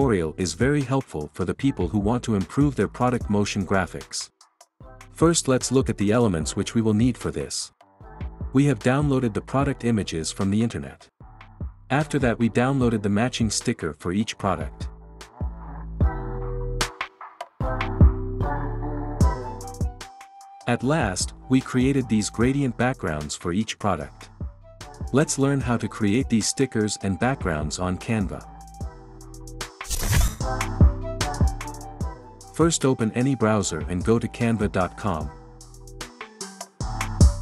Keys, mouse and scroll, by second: 4.0-5.1 drag, 32.8 click.